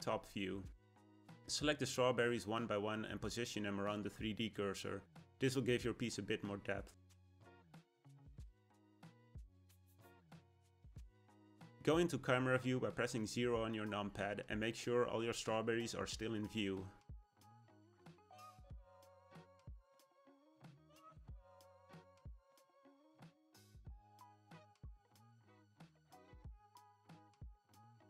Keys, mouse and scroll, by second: 0.8 click, 2.4 KP_7, 4.0 g, 6.6 click, 7.6 g, 9.0 click, 9.9 click, 10.4-12.4 middle drag, 12.4 KP_0, 13.8-14.4 scroll down 1, 14.4 click, 15.7 ctrl+click, 16.6 g, 20.5 click, 22.0 g, 23.8 click.